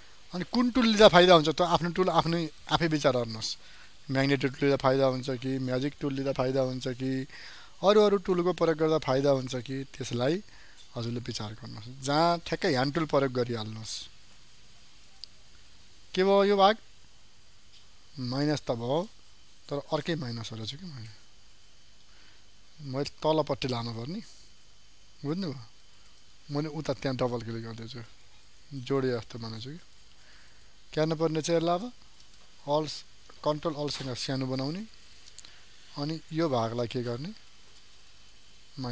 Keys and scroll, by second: 0.2 ctrl+space, 20.9 ctrl+z, 33.4 ctrl+space.